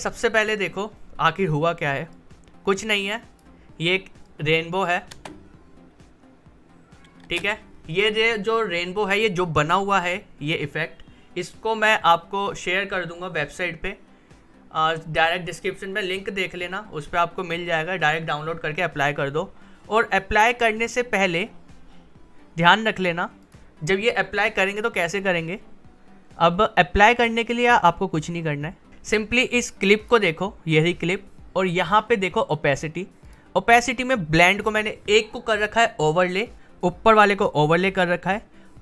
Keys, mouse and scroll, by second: 2.1-5.1 drag, 5.1 space, 7.2 space, 21.4-23.4 drag, 28.9 click.